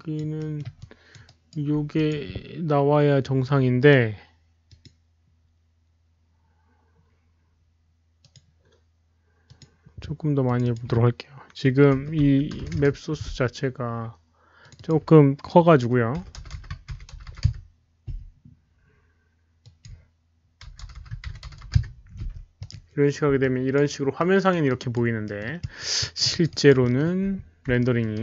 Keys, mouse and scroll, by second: 0.0 alt+right click, 0.3 alt+middle drag, 0.5 alt+right click, 0.7-1.1 alt+drag, 1.2-1.5 alt+right drag, 1.3 alt+middle click, 1.7 alt+middle click, 1.9 alt+click, 3.0 alt+click, 3.0 alt+right click, 3.0 alt+middle click, 3.7 alt+click, 3.7 alt+right click, 3.7 alt+middle click, 4.6 click, 4.8 alt+right click, 4.8 alt+middle click, 6.7 alt+click, 6.7 alt+right click, 6.7 alt+middle click, 7.3 alt+right click, 7.3 alt+middle click, 7.9 alt+right click, 7.9 alt+middle click, 8.2 alt+click, 9.4 alt+click, 9.4 alt+right click, 9.4 alt+middle click, 9.5 alt+right click, 9.5 alt+middle click, 10.4 alt+click, 10.4 alt+right click, 10.4 alt+middle click, 10.6 click, 10.7 alt+right click, 10.7 alt+middle click, 11.9-12.7 typing, 12.2 Tab, 12.7 Return, 12.7 Tab, 12.7 click, 13.9 Return, 13.9 KP_3, 13.9 KP_5, 14.6 Tab, 14.6 click, 14.6 KP_0, 14.6 KP_5, 14.7 click, 16.0 Return, 16.0 click, 16.0-18.2 typing, 16.1 Tab, 16.1 click, 16.7 Tab, 16.7 Return, 16.7 click, 16.9 Tab, 16.9 Return, 16.9 click, 17.4 Return, 17.4 Tab, 17.4 click, 18.2 Return, 18.2 Tab, 19.5 Return, 19.5 click, 19.5-21.4 typing, 19.8 Return, 19.8 Tab, 21.1 Tab, 21.7 Return, 22.5 click, 23.3 Return, 23.3 Tab, 23.3-23.7 alt+drag, 23.3 KP_0, 23.3 KP_3, 24.1 alt+drag, 24.6-25.2 alt+right drag, 25.2 alt+middle drag, 25.5 alt+drag, 26.0 Return, 26.0 Tab, 26.0 alt+right click, 26.0 alt+middle drag, 26.0 KP_0, 26.0 KP_3, 26.2 alt+click, 26.5 alt+right click, 26.8 alt+middle click, 27.7 alt+middle drag, 28.1 alt+right drag.